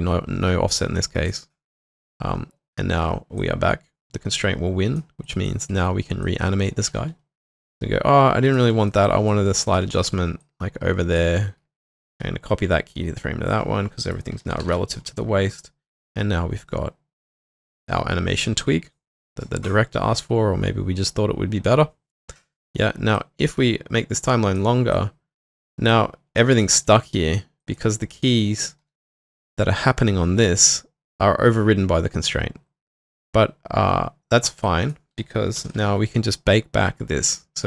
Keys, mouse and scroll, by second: 5.4 double click, 5.7 w, 8.6-9.9 typing, 8.9 alt+middle click, 9.3 alt+click, 11.6-12.6 typing, 12.5 middle click, 14.2-15.1 typing, 26.4 alt+click, 27.6 alt+click, 28.8 typing, 35.6 ctrl+alt+..